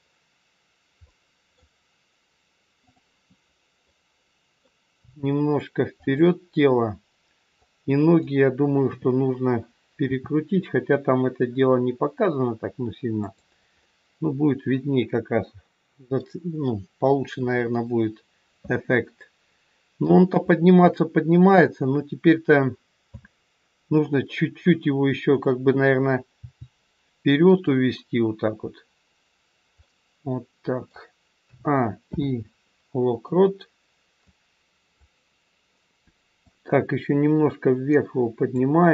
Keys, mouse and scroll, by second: 1.1 middle click, 2.7 click, 3.8 middle click, 5.0 r, 7.6 click, 8.8 KP_3, 10.1 r, 13.8 middle click, 17.3 KP_1, 20.2 middle click, 23.0 a, 26.5 g, 29.8 middle click, 31.3 a, 32.1 i, 34.2 click, 36.4 click.